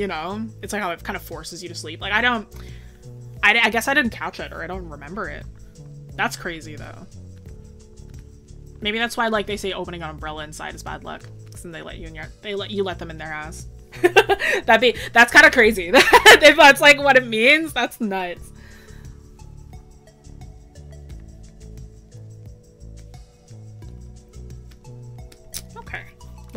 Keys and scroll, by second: 2.5 scroll up 1, 5.5 scroll up 1.